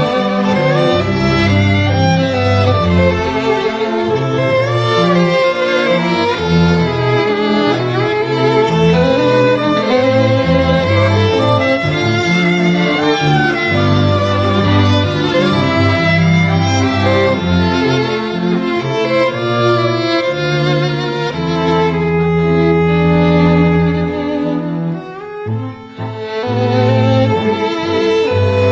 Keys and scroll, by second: 16.4 2, 16.8 7, 17.5 0, 17.8 0, 18.8 4, 19.7 e.